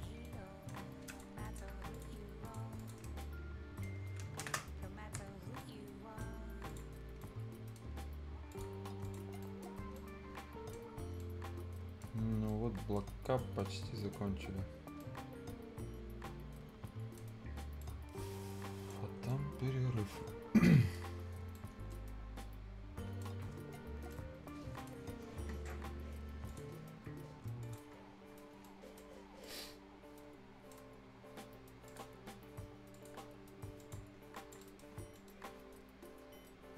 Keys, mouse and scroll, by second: 0.0 ctrl+scroll up 1, 0.2 ctrl+right click, 0.8 ctrl+scroll up 1, 1.1 ctrl+click, 1.4 ctrl+right click, 1.9 ctrl+click, 3.1 ctrl+shift+scroll down 1, 3.2 shift+right click, 4.4 ctrl+shift+space, 5.2 shift+Tab, 5.6 shift+right click, 6.4 shift+scroll up 1, 6.7 shift+click, 7.0 shift+scroll down 1, 7.2 shift+right click, 8.5 shift+click, 9.4 shift+right click, 9.7 shift+scroll down 1, 10.0 shift+right click, 10.9 shift+scroll up 1, 11.2 shift+right click, 12.1 shift+scroll down 1, 12.5 shift+right click, 13.1-13.4 shift+scroll up 1, 13.4 shift+right click, 13.7 shift+scroll up 1, 14.0 shift+right click, 14.2-14.7 shift+scroll down 1, 15.0-17.3 shift+right drag, 17.3 shift+scroll down 1, 17.5 shift+scroll up 1, 17.8 shift+right click, 19.1 shift+scroll up 1, 19.3-21.0 shift+right drag, 21.0 shift+scroll down 1, 21.3 shift+scroll up 1, 21.6-23.6 shift+right drag, 23.6 shift+scroll down 1, 23.9 shift+scroll up 1, 24.1 shift+right click, 25.0 shift+scroll down 1, 26.5 shift+click, 28.0-28.3 shift+scroll down 1, 28.3 shift+scroll up 1, 28.6 shift+right click, 29.4-30.8 shift+right drag, 30.8 shift+scroll down 1, 31.9 shift+click, 34.6 shift+right click, 35.0 shift+scroll up 1, 35.2 shift+middle click.